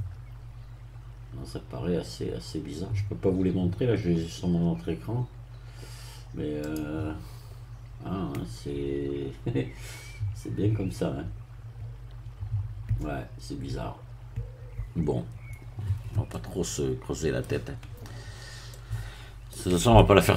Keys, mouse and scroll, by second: 0.4-0.7 scroll down 1, 1.0-1.4 scroll down 1, 2.9-3.3 scroll up 1, 3.4-3.8 scroll up 1, 6.7 click, 16.3-17.5 middle drag, 18.2-18.5 scroll up 1, 18.7 middle click, 19.9-20.3 shift+middle drag.